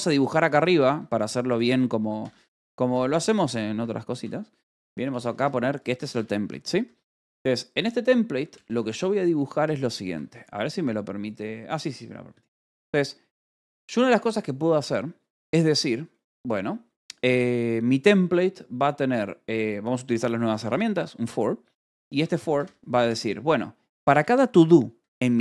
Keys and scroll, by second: 0.4-8.4 typing, 0.8 Escape, 3.6 Escape, 6.3 Escape, 7.3 Escape, 8.7 Escape, 9.5 o, 9.9 Escape, 10.2 k, 10.5 o, 20.4 o, 22.2-25.4 typing.